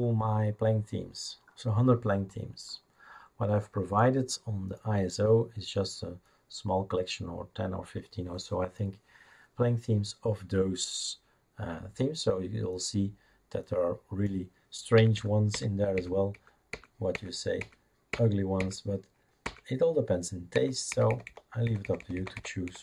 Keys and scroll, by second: 15.0 Up, 15.1 Up, 15.5 Up, 15.9 Up, 16.5 Up, 16.7 Up, 17.1 Up, 17.6 Up, 18.1 Up, 18.6 Up, 19.4 Up, 20.6 Down, 20.9 Down, 21.1 Down, 21.3 Down, 21.6 Down, 21.8 Down, 22.0 Down, 22.1 Down, 22.3 Down, 22.6 Down.